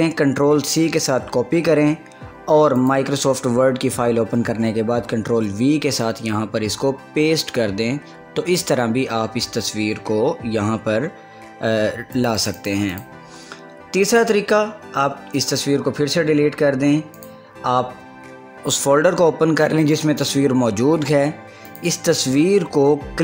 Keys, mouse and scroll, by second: 0.8 ctrl+c, 3.0 click, 3.9 scroll up 1, 4.0 scroll down 1, 4.4-4.8 scroll up 1, 5.4 ctrl+v, 6.7 scroll up 1, 8.1 scroll down 1, 8.9 scroll down 1, 9.2 scroll up 1, 12.4 scroll up 1, 12.6 click, 13.2 click, 17.4 click, 21.9-23.2 drag.